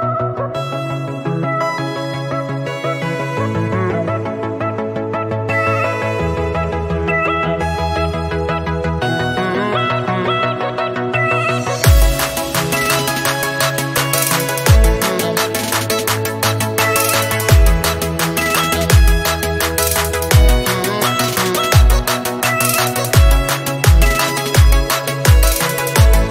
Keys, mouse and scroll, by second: 2.8-4.3 scroll up 2, 4.3 click, 7.0-10.0 drag, 11.0 click, 12.4 click, 14.6 KP_0, 15.4 KP_0, 19.1 KP_0, 20.2 click, 22.6 click, 24.1 click, 25.1 click.